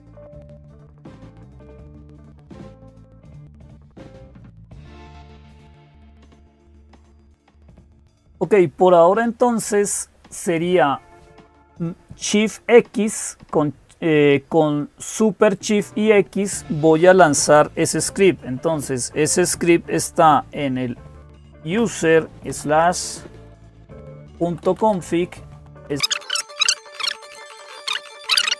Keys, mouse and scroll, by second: 1.2-2.2 drag, 3.7-4.9 right drag, 4.9-17.2 drag, 17.2 typing, 21.1 typing, 22.3-27.7 typing, 27.8 Down, 27.9 Up.